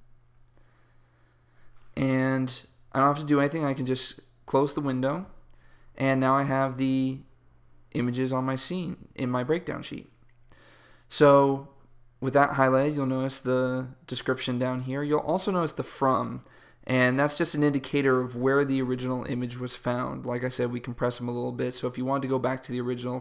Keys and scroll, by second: 0.0-0.2 typing.